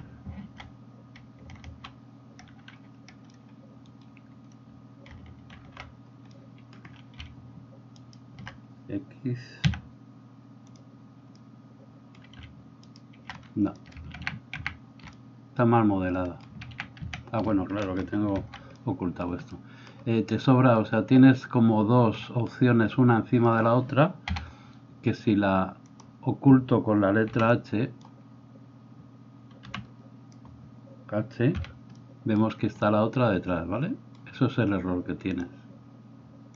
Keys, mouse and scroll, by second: 5.6 alt+j, 8.1 alt+middle click, 8.1 alt+right click, 9.6 x, 12.8 alt+middle click, 12.8 alt+right click, 14.2 ctrl+z, 18.3 alt+h, 24.3 a, 27.4 h, 29.7 b, 31.6 h.